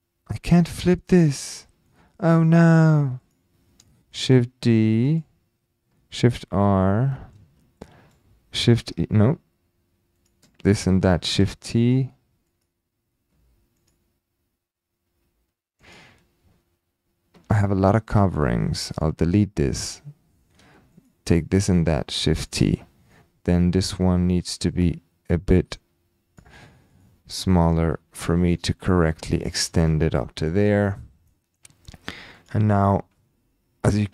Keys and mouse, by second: 1.0-1.8 typing, 1.8-2.3 shift+middle drag, 3.3 click, 4.1 shift+d, 6.2-6.8 typing, 6.9-7.3 middle drag, 7.8 shift+click, 8.5 typing, 10.2 drag, 10.7 shift+click, 11.3 shift+t, 11.8 click, 12.5 click, 13.3 h, 13.8 click, 15.1 h, 17.6 alt+h, 18.1 click, 19.3 Delete, 19.9 click, 21.0 shift+click, 21.8 shift+t, 22.5 click, 23.1 middle click, 25.4 click, 27.1 click, 28.1-28.5 shift+drag, 28.8 shift+click, 29.7 typing, 31.3 middle click, 32.6 click.